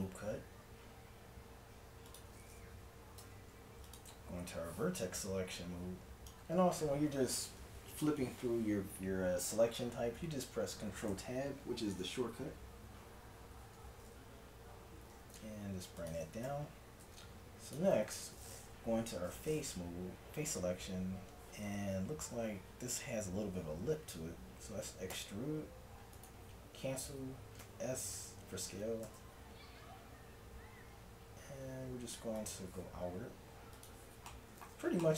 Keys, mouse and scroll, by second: 2.8 a, 3.2 ctrl+Tab, 4.2 z, 5.1 ctrl+click, 11.1 ctrl+Tab, 14.7-16.5 drag, 15.1 g, 16.5 z, 17.0 ctrl+Tab, 21.7-25.8 middle drag, 25.2 e, 27.6 s, 33.8-35.1 drag.